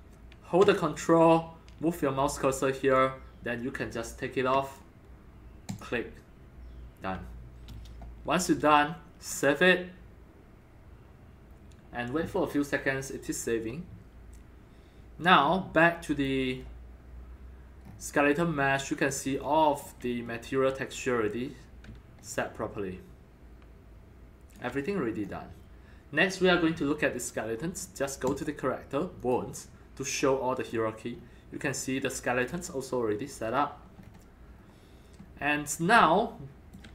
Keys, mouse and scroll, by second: 2.9-4.7 ctrl+drag, 5.7 click, 9.3 click, 10.6-14.4 drag, 16.1-17.8 drag, 17.8 scroll down 4, 18.1-18.9 scroll up 7, 18.9 scroll down 1, 19.4 ctrl+click, 19.8-21.2 ctrl+drag, 20.3-23.4 middle drag, 22.2-24.5 alt+drag, 24.8 scroll down 5, 25.2 scroll up 3, 28.3 click, 29.2 click, 30.6 click, 31.2 scroll up 2, 31.4 scroll down 4, 32.4 click, 33.1 click, 34.0-34.6 scroll down 3, 34.6 scroll up 2, 35.1 scroll down 1, 35.2 scroll up 2, 35.4 scroll down 1, 36.1 alt+middle click.